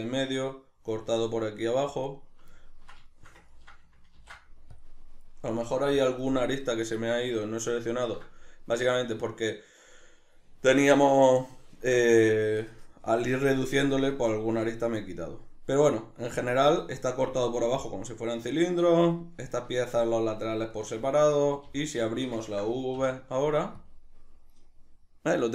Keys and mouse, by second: 2.0 right click, 2.6-24.0 ctrl+middle drag, 4.2 ctrl+e, 6.0 KP_Decimal, 21.6 a, 23.0 u.